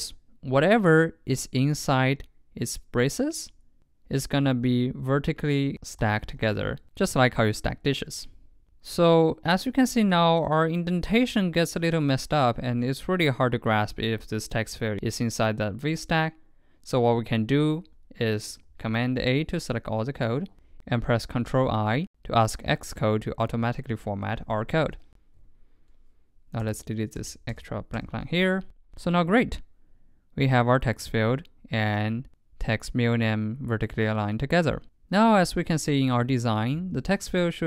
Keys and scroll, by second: 4.7 super+x, 5.7 super+Right, 6.4 super+v, 18.7 super+a, 21.9 ctrl+|, 35.5 super+Tab.